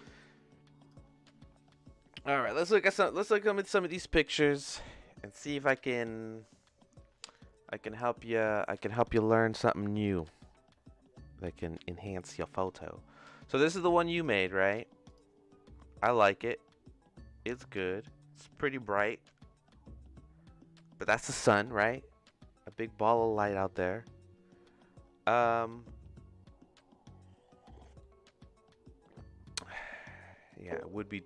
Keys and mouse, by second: 7.5 click, 9.1-10.1 drag, 14.1-15.3 drag, 28.1-29.2 middle drag.